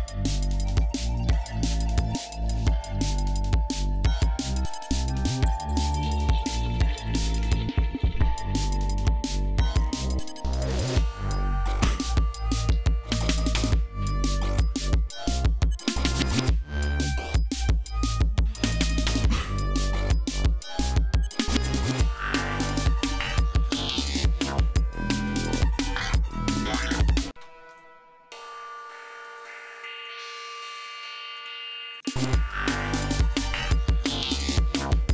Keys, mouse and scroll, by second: 0.2 click, 1.2 shift+click, 3.7 shift+right click, 4.9 shift+right click, 5.9 click, 6.9 shift+right click, 7.7 click, 11.5 ctrl+scroll down 2, 12.5 g, 12.8 ctrl+scroll up 2, 15.2-15.6 scroll down 2, 16.0 scroll down 2, 17.0 ctrl+scroll down 2, 17.3 ctrl+scroll up 2, 18.5 scroll down 2, 19.1-20.1 scroll down 6, 20.5 scroll down 2, 22.3 ctrl+scroll down 2, 22.7 ctrl+scroll up 1, 23.3-24.2 ctrl+scroll up 2, 26.9 ctrl+scroll up 1, 27.1 ctrl+space, 27.3 ctrl+e, 27.4 ctrl+click, 28.1 click, 28.5 click, 29.5 click, 30.7 click, 31.1 click, 31.7 click, 31.9 space, 32.9 g, 33.2 ctrl+scroll down 1, 34.3 ctrl+scroll down 1, 34.7 ctrl+scroll up 1.